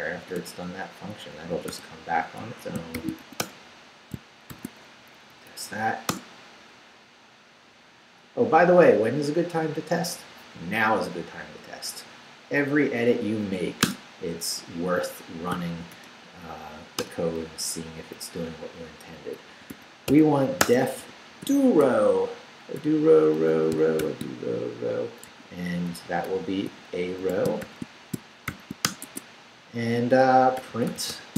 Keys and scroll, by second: 0.2 d, 1.2 Up, 1.5 d, 2.4 Escape, 2.9 shift+;, 3.2 shift+w, 3.4 Return, 4.1 shift+Return, 4.5 shift+;, 5.0 shift+Up, 6.1 Return, 13.9 Return, 15.5 i, 15.9 Return, 18.0 Up, 19.3-24.0 typing, 25.3-28.5 typing, 28.8 shift+Return, 29.0 Tab, 30.3-31.3 typing.